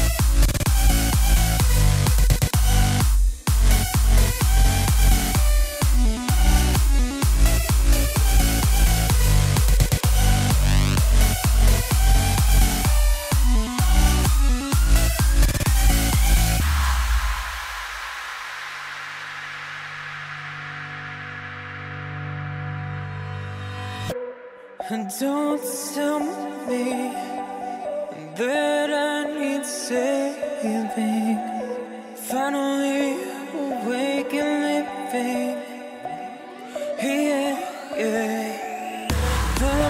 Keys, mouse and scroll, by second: 0.4-4.0 drag, 11.8 click, 13.5 click, 14.7-16.8 right drag, 16.8 KP_3, 18.1 KP_1, 18.6-19.4 scroll up 6, 19.4 shift+middle click, 19.9-22.0 scroll up 3, 22.0-25.5 right drag, 25.5 click, 29.0 click.